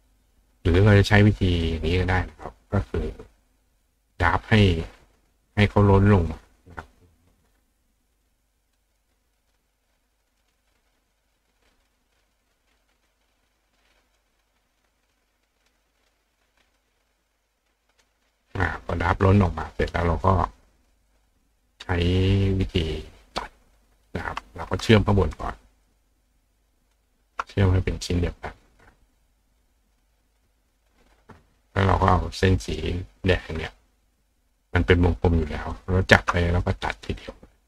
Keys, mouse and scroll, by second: 1.6 click, 2.5 click, 3.2 click, 3.8 click, 5.1 click, 5.5 click, 5.9 click, 7.3 click, 8.2 click, 9.7 click, 10.4 click, 11.1 click, 11.6-12.2 drag, 12.5 click, 13.1 click, 14.2 click, 15.7 click, 16.8 click, 18.0 click, 21.1 click, 24.8 shift+click, 25.3 shift+click, 25.9 shift+click, 26.8 shift+click, 30.7 click, 31.9 click, 32.6 click, 35.7 shift+click, 37.2 click.